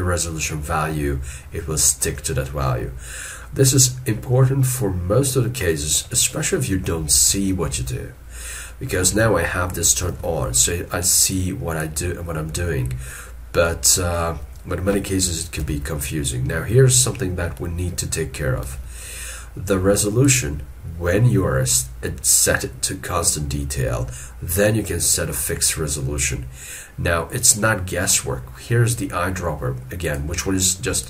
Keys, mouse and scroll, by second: 7.2 alt+e, 15.6 ctrl+z, 18.7 alt+e.